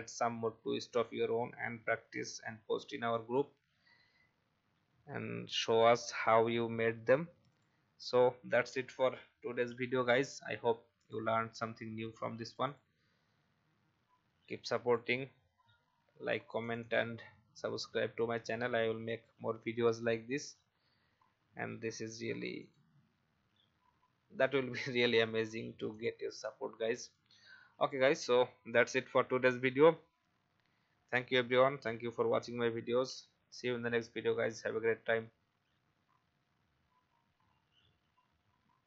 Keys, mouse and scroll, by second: 9.7 i, 11.0 click, 11.9 v, 12.4-15.7 drag, 20.2 i, 22.6 click, 26.4 v.